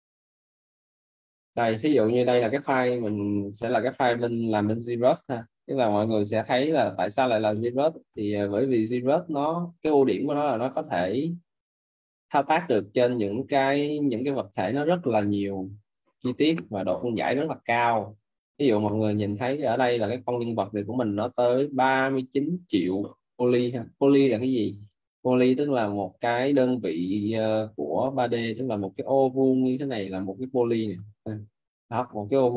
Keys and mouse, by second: 1.2 click, 13.2 right click, 23.5 click, 28.4 Tab.